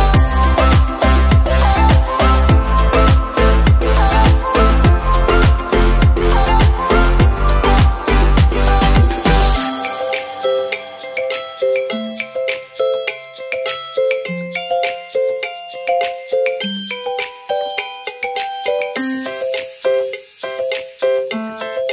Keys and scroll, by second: 0.0 Down, 0.3 Down, 0.7 Down, 1.2 Down, 1.7 Down, 2.0 typing, 6.0 Down, 6.5 Down, 7.0 Down, 7.4 Down, 7.8 Down, 8.5 Down, 8.9 Down, 9.7-10.1 typing, 15.7 Down, 16.4 Down, 17.1 Down.